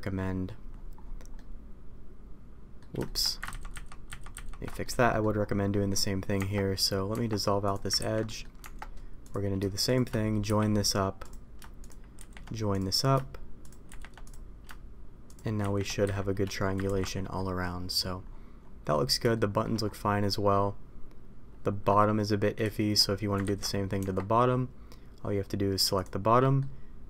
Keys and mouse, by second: 0.1 middle click, 1.3-2.7 middle drag, 3.0 shift+middle click, 3.5 ctrl+shift+z, 4.8 middle click, 5.6 middle click, 6.3 Tab, 7.0 Tab, 7.6 click, 7.9 ctrl+x, 8.2 middle click, 8.5 Tab, 9.8 shift+click, 10.4 j, 11.1 click, 12.1 shift+r, 12.6 click, 13.5 shift+click, 14.2 click, 16.0 a, 16.8 ctrl+t, 17.3 middle click, 18.8 middle click, 19.3 shift+middle click, 20.2-21.8 middle drag, 22.6 shift+middle click, 23.4 ctrl+z, 23.9 Tab, 26.3 middle click.